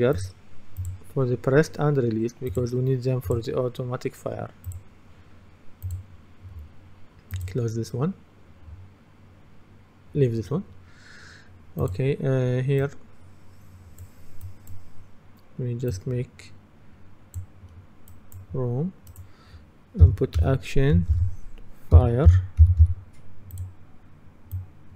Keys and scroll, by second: 22.0-23.4 typing.